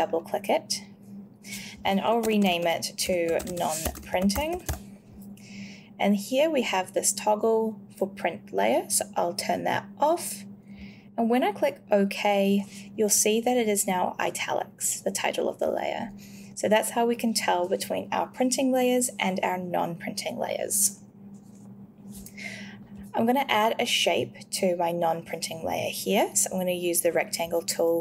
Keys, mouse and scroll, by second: 2.0-5.1 typing, 3.3 Caps_Lock, 9.5 click.